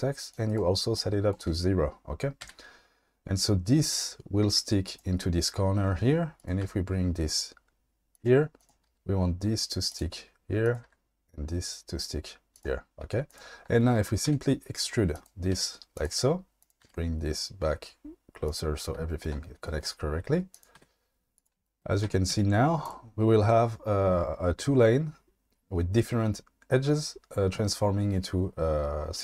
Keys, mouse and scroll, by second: 0.3 click, 1.0 click, 2.4 g, 4.8 click, 6.6 g, 8.1 click, 8.6 click, 8.8 g, 9.9 click, 10.8 g, 12.5 click, 14.3 e, 15.1 click, 15.5 e, 15.9 click, 16.8 g, 18.4 click, 20.5 click, 20.8 e, 22.0 Tab, 22.3 q.